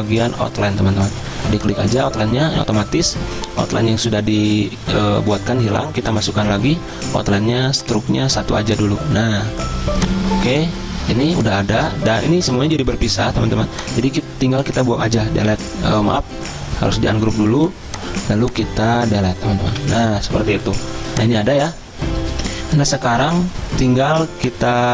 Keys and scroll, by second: 11.1 z, 11.8 v, 15.5 Delete, 16.2 ctrl+z, 19.7 Delete.